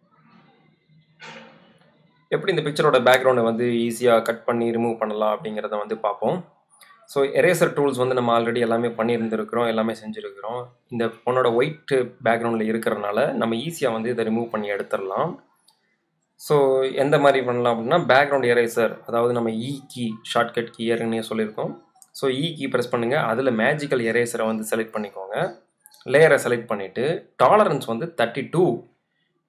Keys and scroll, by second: 17.2 e.